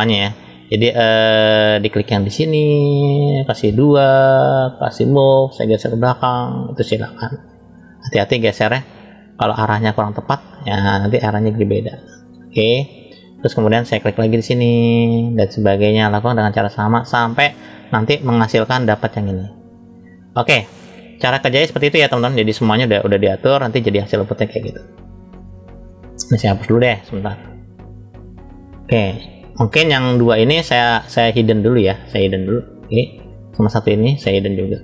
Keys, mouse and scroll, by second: 1.7 click, 2.4 click, 3.5 click, 4.8 click, 5.8 click, 6.0 click, 8.8-9.4 drag, 9.8 middle click, 11.0 click, 11.2 click, 14.0 click, 15.0 click, 19.4 click, 21.1 click, 21.6-22.3 drag, 22.9-23.6 middle drag, 24.1-24.7 scroll down 2, 24.8-25.3 middle drag, 26.5-27.6 drag, 28.2-29.4 drag, 31.2 click, 32.4 click, 33.4 click.